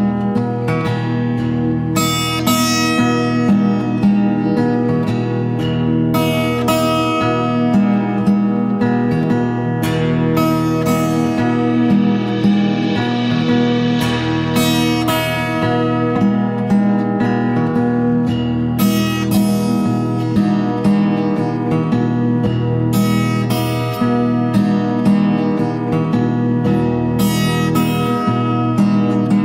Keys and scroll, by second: 7.9 Escape, 8.0 Escape, 18.1 Escape, 19.1 ctrl+a.